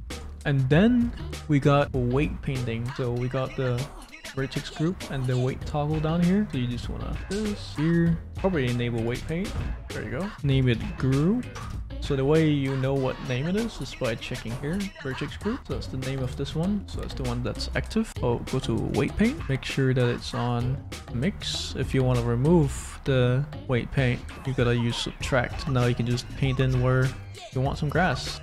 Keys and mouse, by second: 1.8 click, 7.7 middle click, 8.9 right click, 10.2-11.6 right drag, 13.7 middle click, 16.2 middle click, 17.7 click, 17.7 right click, 18.1 middle click, 19.4-21.4 middle drag, 22.0-25.6 middle drag, 27.4-28.4 drag.